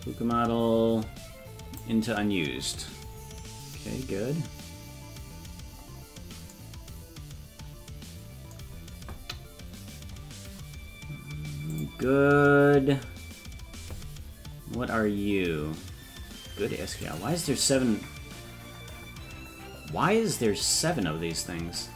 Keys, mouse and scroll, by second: 0.3-1.5 scroll down 2, 4.0-4.8 scroll down 1, 4.8-5.6 scroll down 3, 5.7-6.5 scroll up 5, 10.1 scroll up 2, 11.7 click, 17.0 click.